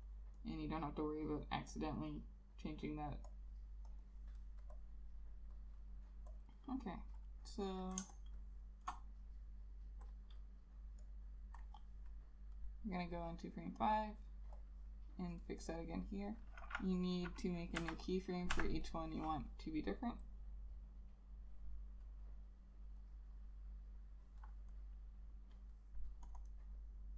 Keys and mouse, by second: 4.2 double click, 8.1 space, 14.2 double click, 17.9 F6, 18.7 F6, 26.5 double click.